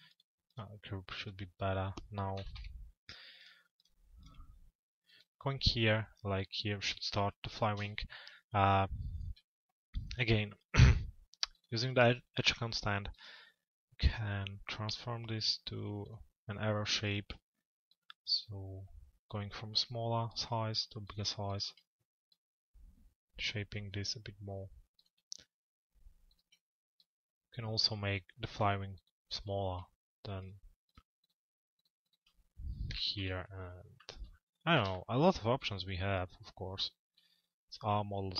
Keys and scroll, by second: 2.1 t, 2.6 z, 32.8 p.